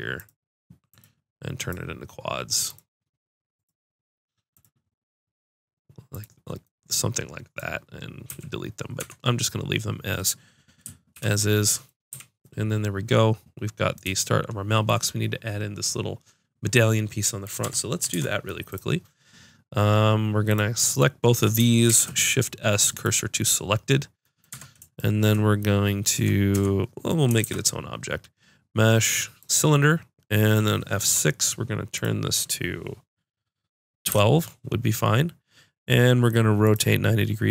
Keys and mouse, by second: 6.7-8.3 drag, 8.3 a, 9.0 Tab, 11.1 alt+h, 12.1 a, 17.4-19.2 drag, 17.6 Tab, 20.5-21.6 drag, 21.9 shift+s, 24.5 Tab, 26.1 Tab, 26.5 Tab, 27.4 shift+a, 31.1 F6.